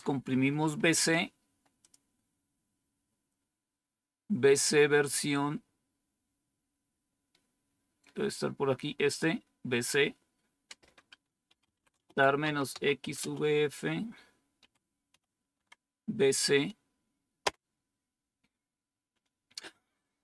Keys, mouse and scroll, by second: 1.7 click, 4.6-5.6 scroll down 3, 9.1 click, 10.4 scroll down 1, 11.3-13.4 typing, 14.5-15.0 typing, 15.5 Tab, 17.4 Return.